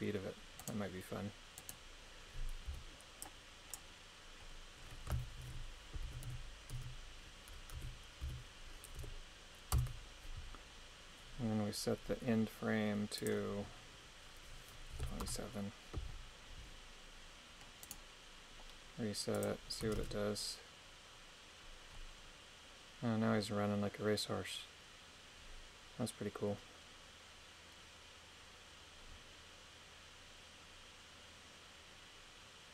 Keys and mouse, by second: 0.6 right click, 1.6 right click, 2.7 b, 3.2 click, 5.4 shift+Left, 6.1-9.0 typing, 9.8 Return, 13.2-15.3 drag, 17.8 right click, 19.3 click, 20.0 shift+space.